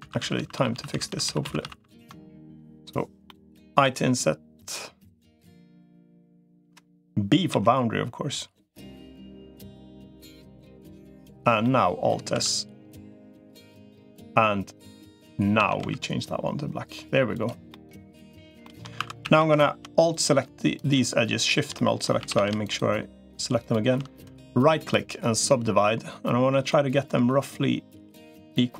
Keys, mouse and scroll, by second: 0.0 ctrl+z, 0.2 ctrl+z, 0.4 ctrl+z, 0.6 ctrl+z, 0.8 ctrl+z, 1.0 ctrl+z, 1.2 ctrl+z, 1.4 ctrl+z, 2.1 middle click, 3.0 middle click, 3.6 i, 11.4 middle click, 12.2 alt+s, 15.4 a, 15.6 g, 17.5 middle click, 18.4 shift+middle click, 18.8 2, 19.0 a, 19.2 a, 21.5 middle click, 22.0 a, 22.4 alt+shift+click, 24.0 right click, 25.3-26.3 middle drag, 26.5-28.2 middle drag.